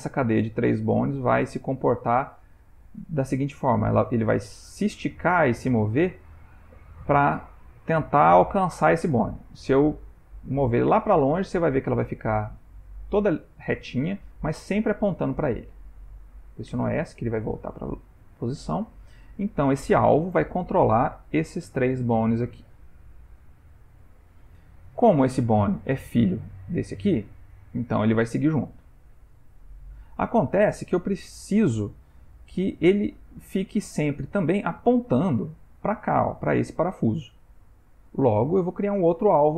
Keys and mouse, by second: 5.3 ctrl+middle click, 6.4 ctrl+middle click, 7.1-7.6 shift+middle click, 8.5 g, 17.7 ctrl+middle click, 18.4 shift+middle click, 19.0 ctrl+middle click, 19.6 ctrl+middle click, 21.2 click, 21.7 click, 22.2 click, 23.6 ctrl+middle click, 25.3 click, 26.3 click, 27.5 click, 27.8 g, 37.8 shift+middle click, 38.3 shift+middle click.